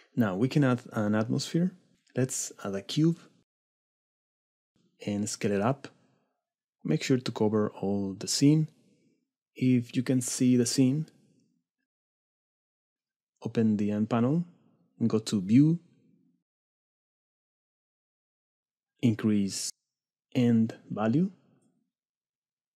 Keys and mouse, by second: 0.9-1.5 middle drag, 1.9 shift+a, 5.4 s, 6.1 s, 6.8 s, 8.8 click, 8.9 s, 10.3 click, 12.7 right click, 13.5 right click, 20.6-22.7 right drag, 22.1 KP_0, 22.3 KP_0.